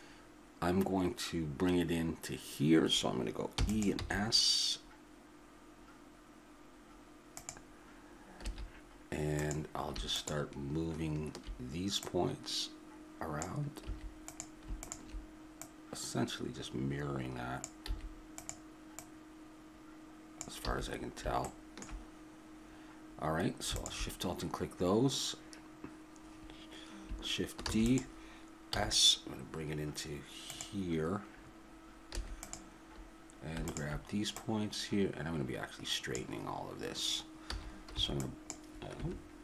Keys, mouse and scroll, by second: 3.5 e, 3.9 s, 8.4 a, 9.4-12.0 drag, 12.0-13.9 drag, 13.9 a, 17.9 a, 20.7 a, 24.4-25.5 drag, 27.7 shift+d, 28.8 s, 32.2 a, 32.4-36.2 right drag, 37.5 a, 38.0 v.